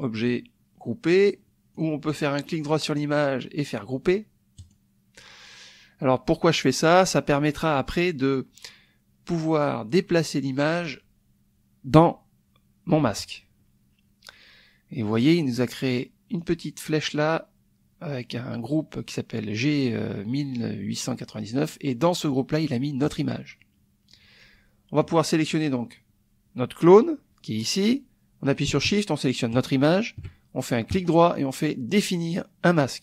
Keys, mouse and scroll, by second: 1.7 click, 2.5 right click, 4.6 click, 16.4 click, 23.0 click, 25.4 click, 29.5 shift+click, 30.9 right click.